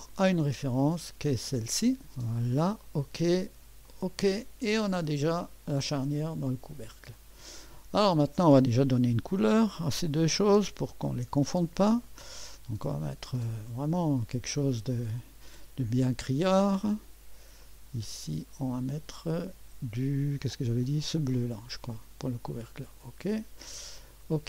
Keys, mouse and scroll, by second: 0.0 click, 1.3 click, 2.9 click, 3.9 click, 4.8-8.3 drag, 9.4 click, 11.1 ctrl+d, 12.1 click, 13.7 click, 15.1 click, 17.6 click, 18.1 click, 18.9 click.